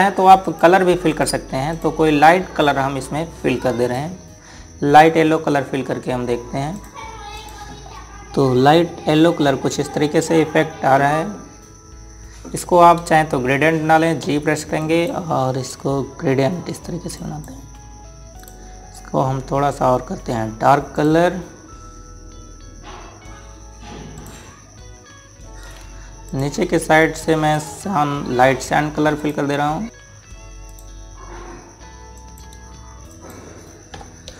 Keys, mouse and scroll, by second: 0.4 click, 1.2 ctrl+right click, 1.9 click, 7.5 click, 8.6 scroll up 1, 10.1 scroll down 1, 11.4-11.7 scroll up 1, 15.0 g, 15.6 click, 21.7 click, 25.0 click.